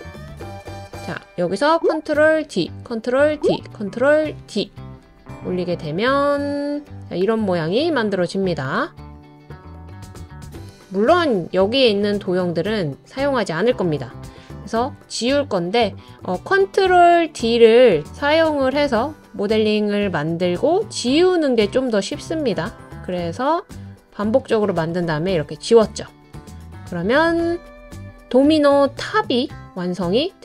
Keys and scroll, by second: 2.4 super+d, 3.3 super+d, 4.4 super+d, 14.8 BackSpace, 18.7 BackSpace, 21.6 BackSpace, 23.0 BackSpace, 24.4 BackSpace.